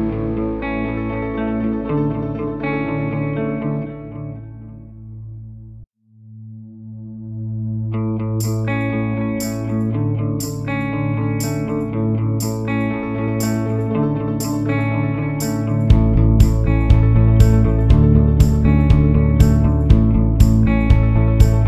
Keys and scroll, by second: 8.2 Delete, 9.8 Delete.